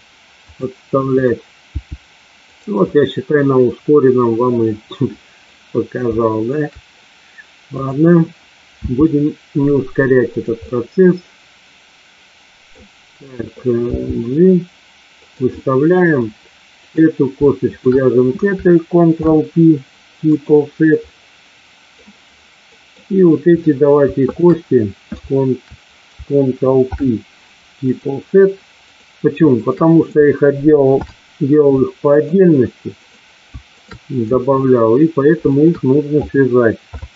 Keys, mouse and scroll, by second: 0.4 click, 1.1 click, 1.6 g, 2.4 click, 3.0-5.5 middle drag, 6.1 shift+middle click, 8.7 e, 10.6-12.7 middle drag, 13.9 g, 15.1 click, 15.5 middle click, 17.6 shift+click, 19.1 ctrl+p, 21.0-22.0 middle drag, 22.7 middle click, 23.4 click, 24.2 shift+click, 26.9 ctrl+p, 28.7 click, 29.5 shift+click, 30.9 ctrl+p, 33.0 click, 33.6 shift+click, 35.4 shift+click, 36.9 ctrl+p.